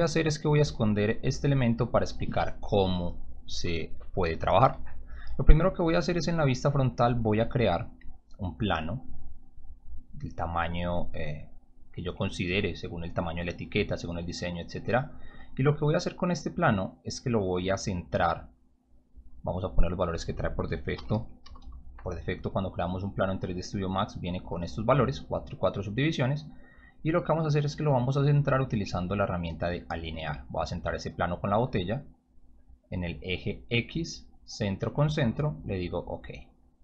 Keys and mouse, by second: 0.2 click, 1.5 click, 5.2 f, 7.8 click, 8.7 click, 10.0-12.2 drag, 12.6 w, 15.8-17.3 drag, 18.8 click, 19.8 click, 20.9 4, 21.1 Tab, 21.4 4, 21.5 Tab, 23.1 click, 29.8 click, 31.5 click, 33.0 click, 33.7 click, 36.0 click.